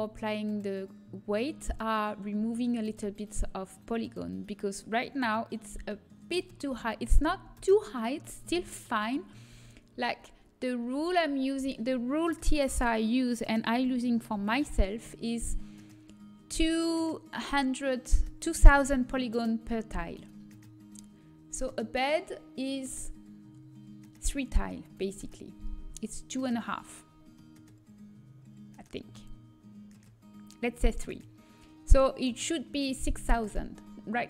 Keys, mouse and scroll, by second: 1.9 middle click, 4.8-6.4 middle drag, 7.0 a, 7.4 Tab, 10.3 KP_7, 22.6-24.9 drag, 27.3-29.1 middle drag.